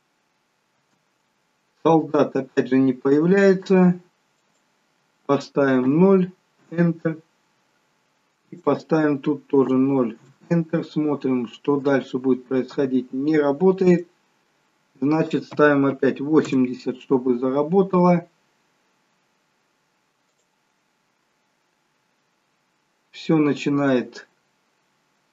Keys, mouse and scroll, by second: 0.9 space, 4.4 click, 8.5 click, 11.7 space, 13.9 click, 18.0 space, 20.5 click.